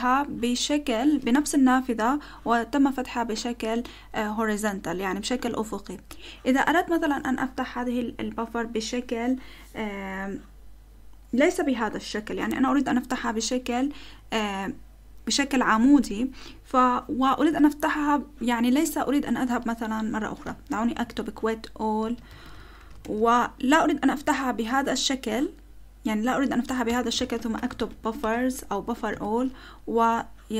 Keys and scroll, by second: 20.8-23.2 typing, 24.1 Up, 26.9 Return, 27.0-30.5 typing.